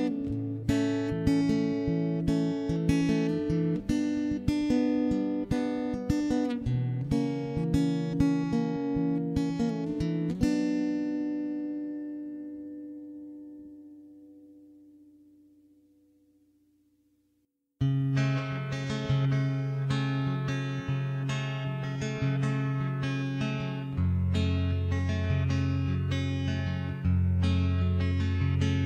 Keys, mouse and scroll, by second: 0.2 middle click, 0.8 middle click, 1.2 ctrl+l, 1.4 middle click, 1.4 h, 2.2 right click, 2.5 click, 2.6 middle click, 2.8 Tab, 3.1 shift+h, 3.3 Tab, 3.5 middle click, 3.9 right click, 4.8 middle click, 5.0 ctrl+KP_1, 5.2-6.2 middle drag, 6.3 e, 6.7 click, 7.3 ctrl+l, 7.5 middle click, 7.5 h, 7.9 c, 8.8 e, 9.1 click, 10.1-11.3 middle drag, 11.5 middle click, 11.9 middle click, 12.3 a, 12.4 alt+h, 12.6 middle click, 12.8 a, 13.2 ctrl+KP_3, 13.8 a, 14.0 c, 15.5 middle click, 16.3 shift+s, 16.5 middle click, 17.4 KP_Decimal, 18.0 ., 18.1 middle click, 18.9 s, 19.7 middle click, 20.3 middle click, 21.1 ctrl+s, 21.2 middle click, 22.5 ctrl+s, 23.0 Tab, 23.3 shift+d, 23.7 m, 24.0 right click, 24.1 Tab, 24.2 middle click, 24.9 right click, 25.2 middle click, 25.3-26.9 right drag, 26.1 click, 26.7 click, 26.9 middle click, 27.1 click, 27.1 right click, 27.6 click, 27.8 middle click, 27.9 click, 27.9 right click, 28.2 middle click, 28.5 right click.